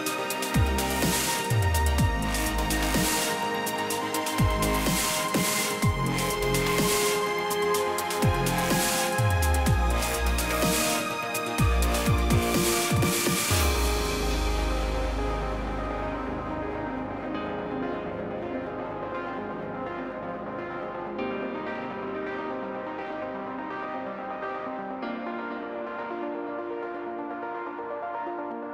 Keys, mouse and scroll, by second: 0.0 click, 0.4 click, 0.5 F2, 1.4 click, 1.6 click, 2.1 click, 2.2 click, 2.8 click, 3.0 Delete, 4.0 click, 4.1 click, 4.6 click, 4.7 Delete, 6.1 click, 6.9 click, 7.5 click, 9.4 click, 9.9 F1, 10.1 click, 12.1 click, 13.6 click, 13.9 F1, 15.1 click, 15.8 click, 17.6 click, 19.6 F2, 21.2 click, 22.5-25.0 drag, 22.5 ctrl+shift+c, 25.1 click, 25.3-27.5 drag.